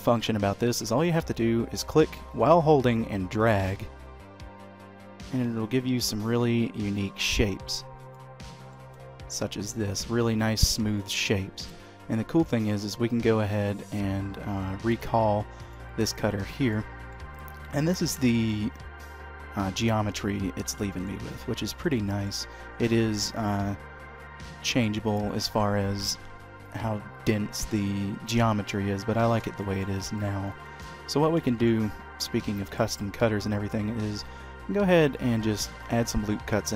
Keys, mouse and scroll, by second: 2.8 click, 8.5 middle click, 13.6-14.3 scroll down 4, 14.3 scroll up 1, 15.4 click, 16.5 click, 17.0 middle click, 17.7 scroll down 2, 18.0 shift+middle click, 18.3 middle click, 20.7 shift+middle click, 21.1 middle click, 21.8 shift+middle click, 23.2-23.8 scroll up 3, 24.3 shift+middle click, 25.1 shift+middle click, 25.5-26.6 scroll down 1, 28.6 middle click, 29.4 shift+middle click, 29.9 Tab, 30.3 middle click, 30.9-31.3 scroll down 2, 31.3 shift+middle click, 32.5 ctrl+r, 35.9-36.3 scroll up 1, 36.3 middle click.